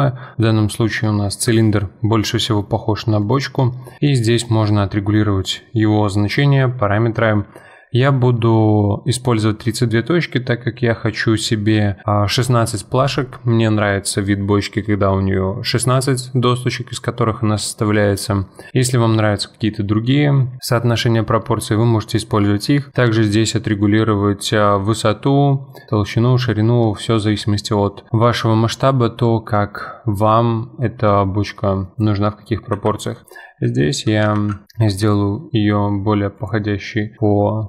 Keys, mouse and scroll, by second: 0.7-1.3 scroll up 2, 1.3 KP_Decimal, 3.2-6.0 drag, 9.8-11.5 scroll down 2, 11.5-12.6 scroll down 1, 26.9-27.5 middle drag, 27.5-28.1 scroll down 1, 28.1-30.7 middle drag, 31.6-32.7 middle drag, 32.7 s, 36.7-37.6 middle drag.